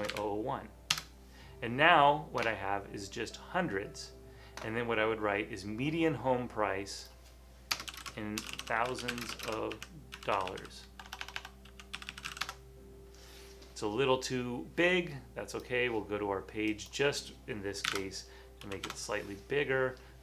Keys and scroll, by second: 0.0-0.6 typing, 7.7-12.8 typing, 17.7-19.3 typing.